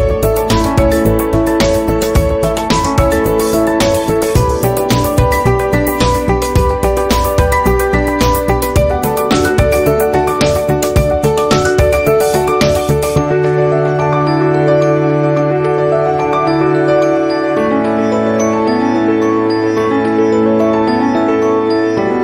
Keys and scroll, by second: 10.0 p, 15.0 ctrl+z, 19.3 v.